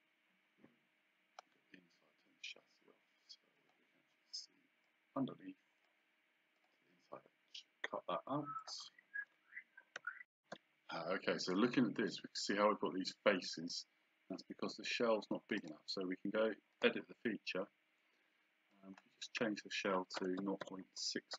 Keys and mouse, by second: 3.6 click, 4.9 click, 6.6 click, 8.6 click, 15.6 right click, 16.7 click, 18.7 click, 20.2 KP_0.